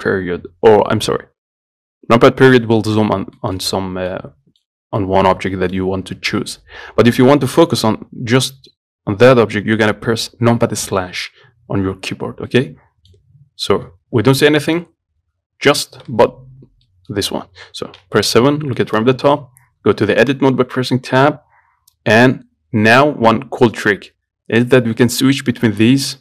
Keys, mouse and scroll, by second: 2.5-2.9 scroll up 2, 2.9 scroll down 2, 3.1 scroll up 3, 3.6 shift+middle click, 3.8-4.3 scroll down 4, 4.3 middle click, 4.9-5.2 scroll up 3, 5.2-6.3 middle drag, 6.3 scroll up 1, 6.6-7.2 scroll down 2, 7.2-9.5 scroll up 1, 9.5 KP_Divide, 12.4-12.7 scroll up 2, 12.7-14.0 middle drag, 14.0-14.3 scroll up 1, 14.3 scroll down 11, 14.6 middle click, 15.0-15.4 scroll up 3, 16.0 scroll up 3, 16.4 shift+middle click, 16.5 scroll down 1, 17.1-18.3 middle drag, 18.3 KP_7, 18.8 scroll down 1, 19.0 shift+middle click, 19.5 Tab, 20.0-20.5 scroll down 2.